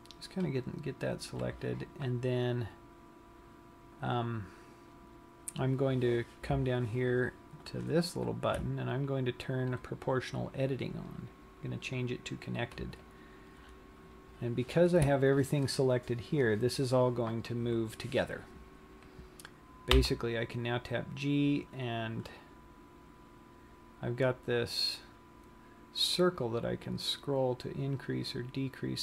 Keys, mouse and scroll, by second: 1.4 right click, 20.5 g.